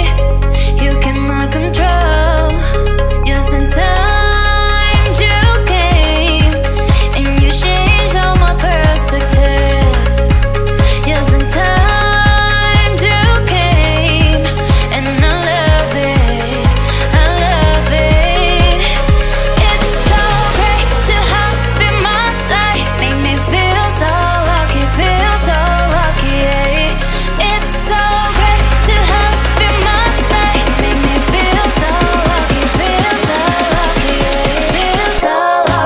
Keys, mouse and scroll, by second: 0.9-1.6 typing, 2.0 Return, 2.6 click, 2.7 space, 2.9 scroll up 1, 2.9 middle click, 3.6 scroll down 1, 4.4 shift+z, 5.0 scroll up 1, 6.0 middle click, 6.9 click, 7.7 scroll down 1, 8.2 shift+middle click, 9.0-9.4 scroll up 1, 9.5 shift+scroll down 1, 9.6 shift+middle click, 10.5 click, 11.3 scroll up 1, 11.5 m, 12.0 click, 13.0 Right, 14.6 click, 14.6 click, 16.3-17.3 typing, 18.0 Return, 18.8 click, 19.9 typing, 21.3 Return, 24.4 click, 25.1 m, 25.4 click, 26.4 Right, 27.3 typing, 28.0 Return, 29.3 p, 29.5 click, 30.0-32.0 middle drag, 32.0 click, 32.3 space, 32.4 scroll down 1, 32.6 shift+middle click, 32.6-33.4 shift+scroll up 2, 34.1 click, 35.2 e, 35.3 click, 35.4 click.